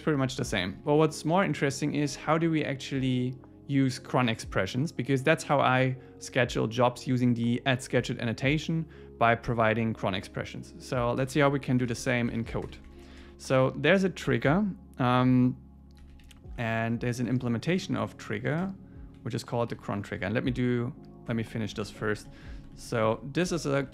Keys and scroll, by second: 0.8 shift+super+Left, 11.2 Return, 18.6 Return, 21.3 Tab, 21.8 alt+Left, 22.7 Left.